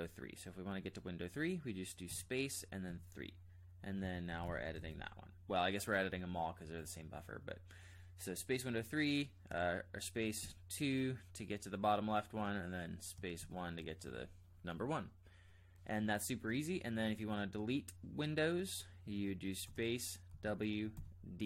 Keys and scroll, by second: 2.1-5.3 typing, 6.1 Escape, 9.5 space, 10.4 2, 13.1-13.6 typing, 19.6 space, 20.3 w, 20.9 d.